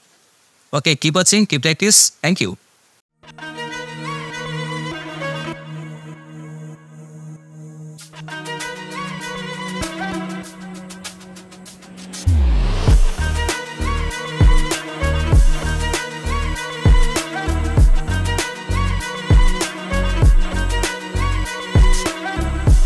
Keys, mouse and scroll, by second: 0.4 click.